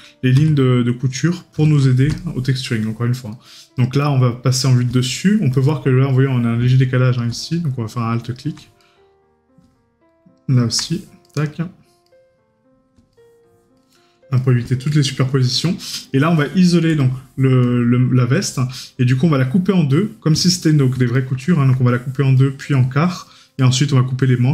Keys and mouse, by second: 2.2 right click, 5.1 right click, 8.9 right click, 11.3 right click, 20.5 right click.